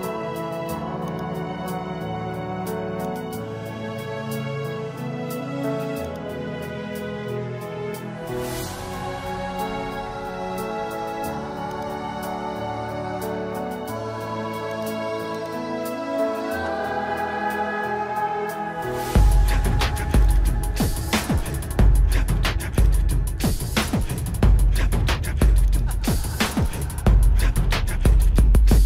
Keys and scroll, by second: 1.5 space, 6.2 space, 11.7 ctrl+=, 12.3 ctrl+=, 12.8 ctrl+=, 13.4 space, 14.7 ctrl+=, 16.6 space, 19.9 space, 20.8 space, 23.1 space, 26.2 space.